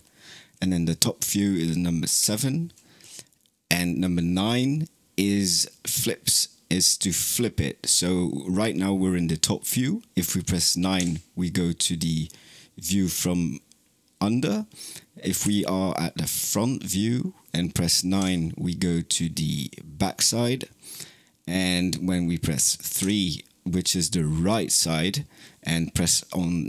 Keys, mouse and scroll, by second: 2.0 KP_7, 10.8 KP_9, 15.3 KP_1, 22.9 KP_3.